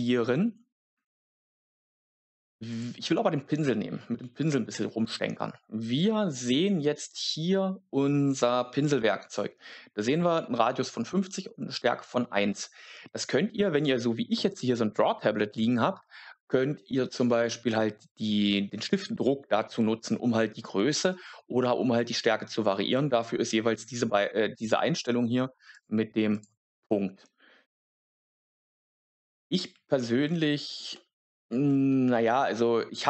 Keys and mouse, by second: 2.6 click, 4.4 click, 25.6 click, 26.2 click, 30.9 shift+middle click, 32.2-33.0 middle drag.